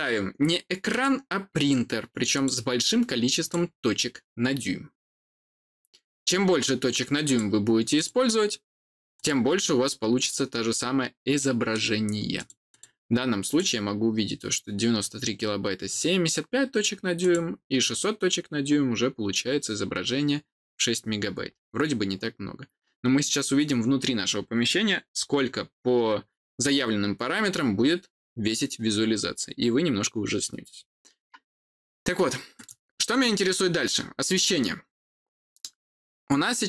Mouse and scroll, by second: 0.8 click, 2.2 click, 3.3 click, 6.4-7.2 scroll down 2, 7.2 click, 7.9 click, 9.1 click, 10.1 click, 11.3 middle click, 12.3 click, 12.6 click, 13.4 click, 15.8 click, 17.1 click, 21.0 scroll down 2, 21.4-24.2 scroll up 2, 24.2-25.2 scroll up 1, 25.2-30.5 scroll up 1, 30.5-32.2 scroll up 1, 32.2 scroll up 1, 32.5 click.